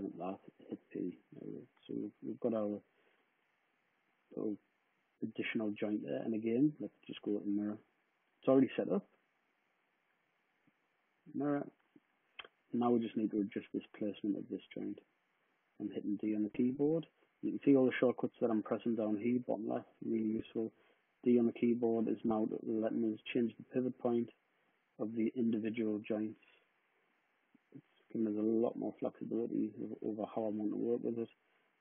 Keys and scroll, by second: 0.4 p, 13.3 w, 19.5 d.